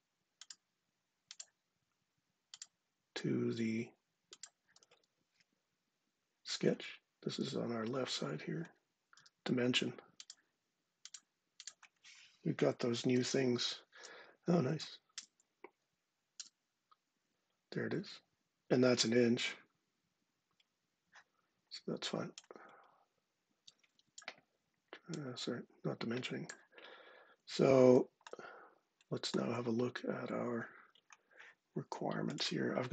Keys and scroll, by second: 4.8 ↻, 9.0 d, 12.2-13.4 typing, 14.5 Down, 14.9 Return, 16.2 Return.